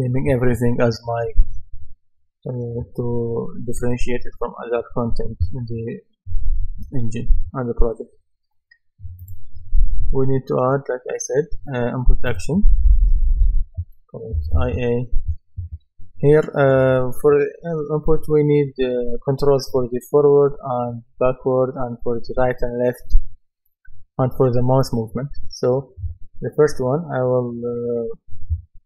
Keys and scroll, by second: 14.1-15.1 typing.